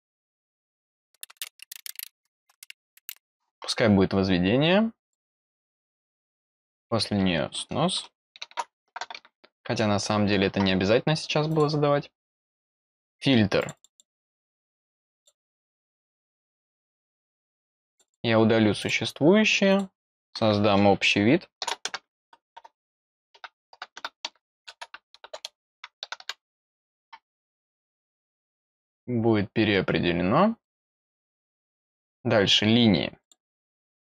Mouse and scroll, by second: 0.2 click, 0.5 click, 5.0 click, 6.7 click, 11.5 click, 13.6 click, 13.7 click, 13.9 click, 14.9 click, 15.1 click, 15.9 click, 16.3 click, 17.0 click, 17.2 click, 17.4 click, 17.6 click, 17.7 click, 17.9 click, 18.0 click, 18.8 click, 19.7 click, 27.6 click, 28.1 click, 28.7 click, 30.6 click, 33.2 click, 33.9 click.